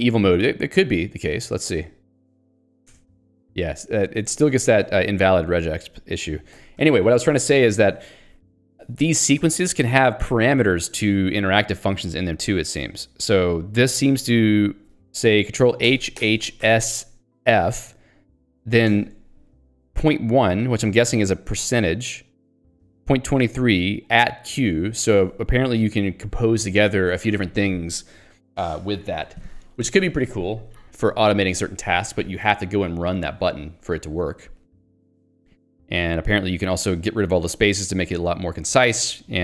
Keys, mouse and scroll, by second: 1.1-1.6 scroll up 1, 2.5 click, 2.6 click, 2.9 alt+Return, 4.2 ctrl+z, 4.5 Escape, 4.8 j, 7.1 Escape, 7.6 k, 8.7 l, 13.0 h, 14.1 l, 14.7 h, 16.6 s, 18.9 ctrl+g, 25.3 Escape, 25.5 k, 26.1 j, 26.9 Escape, 38.8 click.